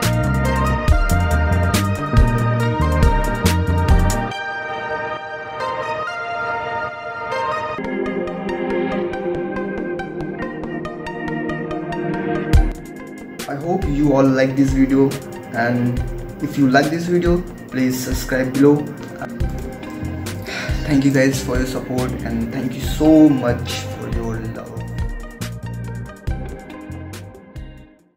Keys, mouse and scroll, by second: 3.4 space, 3.6 ctrl++, 3.9 right click.